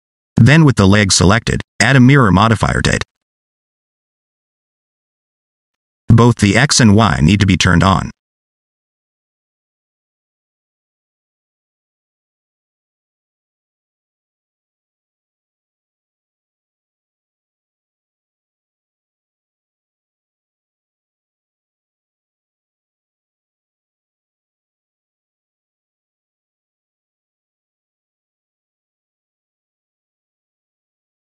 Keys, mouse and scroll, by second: 1.6 click, 4.4 scroll down 2, 4.6 middle click, 8.3 click, 9.0 middle click, 12.1 click, 12.7 scroll up 1, 13.4 alt+z, 13.7-14.5 scroll down 1, 14.5 Tab, 15.7 a, 17.3 g, 20.3 alt+z, 21.0 Tab, 21.2 scroll down 1, 21.3 middle click, 24.4 F2, 25.4 BackSpace, 25.5 BackSpace, 27.7 middle click.